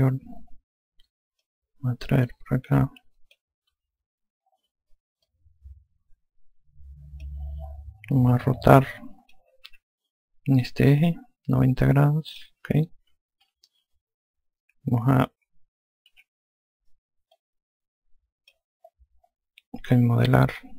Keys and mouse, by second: 0.5 F2, 2.3 click, 4.6 F1, 6.1 click, 9.0 alt+click, 10.5 r, 11.8 click, 14.3 F2, 17.0 e, 18.2 click.